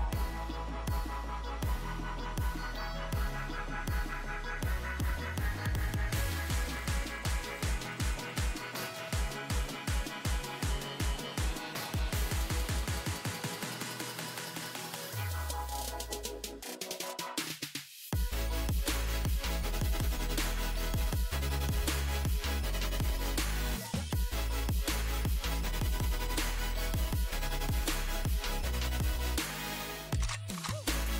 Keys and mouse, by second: 1.0 KP_1, 1.3 z, 3.9 z, 4.6 z, 4.8 Tab, 6.3 z, 8.0 Tab, 8.7 z, 12.1 click, 13.5 a, 15.9 z, 16.2 z, 17.4 c, 20.1 z, 20.6 z, 22.3 c.